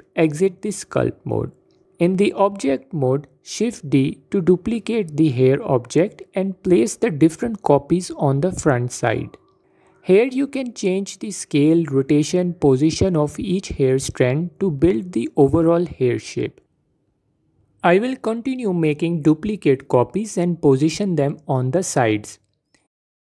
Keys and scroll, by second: 1.0 Tab, 2.7 shift+d, 4.4 shift+d, 5.8 s, 8.9 shift+d, 9.4 s, 13.1 shift+d, 18.4 shift+d, 19.9 ctrl+z, 20.8 s, 22.0 shift+d, 23.1 s.